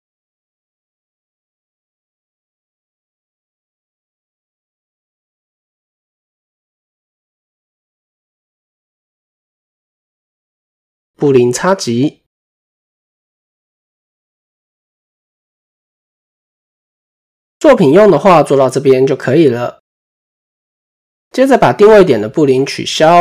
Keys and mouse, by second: 0.9 typing, 2.1-3.5 drag, 3.8 middle click, 5.0 click, 5.9 middle drag, 7.0-8.2 drag, 8.7 middle click, 10.7 shift+click, 11.9 ctrl+KP_Subtract, 12.8-14.0 middle drag, 16.5 click, 17.0 middle click, 17.9 middle click, 19.8 KP_7, 23.0 click.